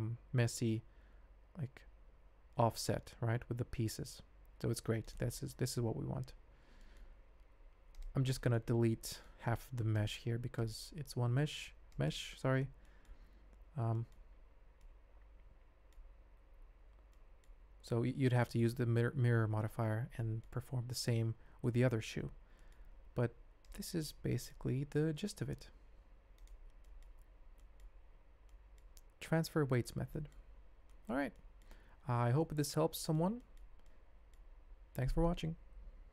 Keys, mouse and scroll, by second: 5.3-5.7 drag, 6.3 ctrl+Tab, 6.8 shift+drag, 8.3 click, 8.7 Tab, 9.3 shift+z, 9.9 click, 11.2 x, 12.8 middle click, 13.3 Tab, 13.8 shift+z, 13.9 shift+drag, 14.8-15.9 drag, 17.1 click, 18.0 alt+a, 20.2-20.5 middle drag, 21.6 middle click, 22.5 middle click, 24.1 ctrl+Tab, 25.1 r, 26.8 drag, 27.2 ctrl+Tab, 28.5 drag, 29.4-29.8 shift+drag, 30.1 ctrl+click, 30.5 alt+a, 30.8 shift+click, 31.3 ctrl+click, 32.4 ctrl+click, 33.4 shift+click, 33.8 ctrl+click.